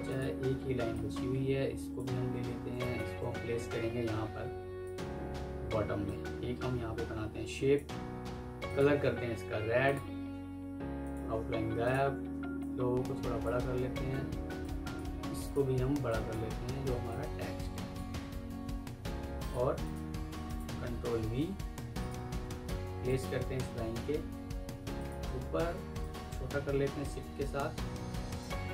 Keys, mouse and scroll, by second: 2.2 ctrl+c, 2.8 alt+Tab, 10.9 alt+click, 14.5 alt+click, 16.0 alt+click, 18.3 Escape, 19.7 double click, 20.7 typing, 22.9 shift+click, 23.3 typing, 24.5 Escape.